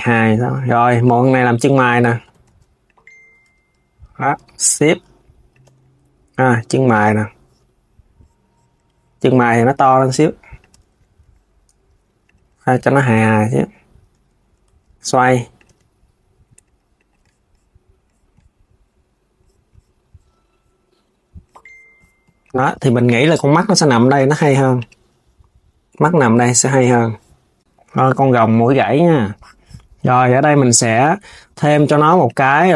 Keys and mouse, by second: 0.7 click, 1.3 KP_1, 2.0 shift+d, 3.2 Tab, 5.3 Tab, 9.0 Tab, 9.3 a, 10.5 Tab, 11.9 click, 12.7 KP_1, 13.8 Tab, 14.2 Tab, 14.6 r, 16.7 click, 22.2 click, 23.9 Tab, 24.4 click, 28.0 s, 29.9 click, 31.9 click.